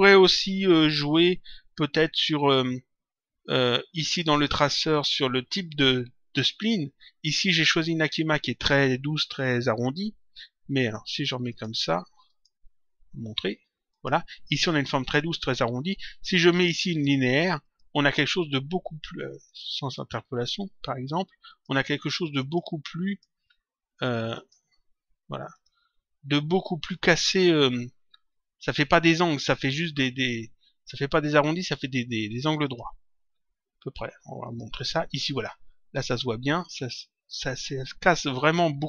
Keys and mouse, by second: 4.3 click, 11.4 click, 13.8 click, 16.8 click, 19.4 click, 21.4 click, 24.3 click, 25.5 click, 32.6 click, 34.4 click, 35.9 click.